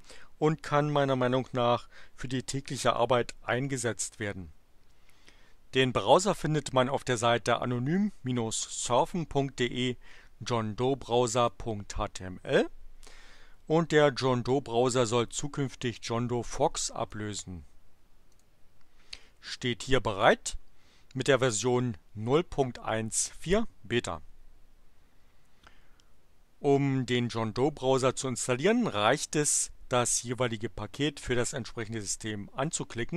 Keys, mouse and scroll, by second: 7.9-11.7 drag, 15.9-17.2 drag, 18.3 click.